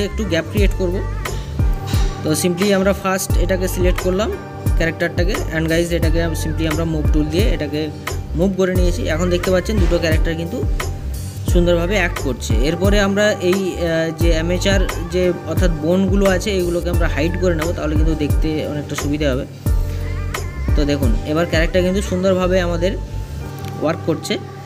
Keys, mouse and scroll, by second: 1.3-2.7 drag, 14.2 click, 18.0 click, 19.1-20.5 drag, 22.7 space, 23.5 click, 23.8 scroll down 2, 24.4-24.6 middle drag.